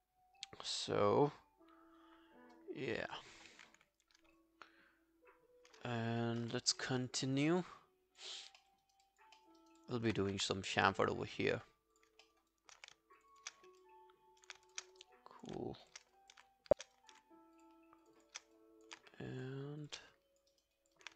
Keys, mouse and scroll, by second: 5.8-6.2 scroll down 1, 6.4 alt+middle click, 6.7 alt+right click, 7.0 alt+click, 7.3 alt+middle click, 7.5 alt+right click, 7.8 alt+click, 8.4 alt+scroll down 1, 8.6 alt+middle click, 8.9 alt+right click, 9.1 alt+click, 9.4 alt+middle click, 9.6 alt+right click, 9.8 alt+click, 10.2 q, 10.5 right click, 12.3 alt+middle click, 12.5 alt+click, 13.2 shift+click, 13.4 shift+click, 13.6 alt+scroll down 1, 13.8 alt+click, 14.7 shift+click, 15.0 alt+click, 16.2 alt+click, 16.7 shift+click, 17.0 alt+click, 17.6 shift+click, 18.1 shift+click, 18.6 alt+click, 19.4 shift+click, 19.8 shift+click, 20.2 alt+click, 20.5 alt+right click, 20.8 alt+click.